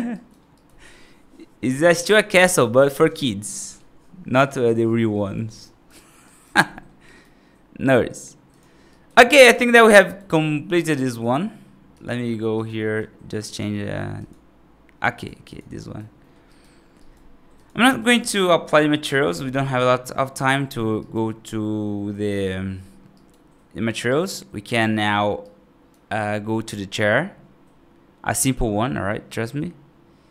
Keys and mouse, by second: 0.0 right drag, 0.4 right drag, 5.5 right drag, 6.1 right drag, 6.6 middle drag, 6.9 right drag, 8.3 click, 8.8 right click, 9.2 middle drag, 9.9 right click, 11.0 click, 11.8 click, 12.4 click, 13.5 y, 14.9 right drag, 15.7 right drag, 16.1 middle drag, 16.4 right click, 16.8 right drag, 17.7 right drag, 18.1 middle drag, 20.9 right click, 23.0 right drag, 23.9 right drag, 25.2 right click, 25.4-25.8 right drag.